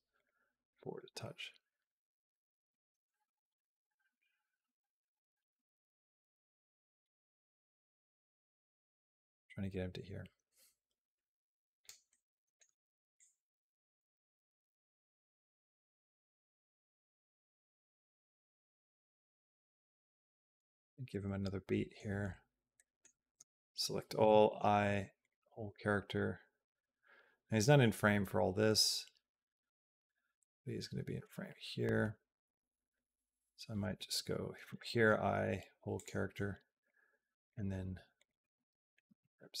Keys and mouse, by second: 0.8-11.7 drag, 12.0 middle click, 13.0-20.4 drag, 21.0 middle click, 22.5 middle click, 23.2 a, 24.0 i, 26.0-33.7 drag, 34.5 i, 36.7 click, 38.0 click, 38.3 middle click, 38.9 g.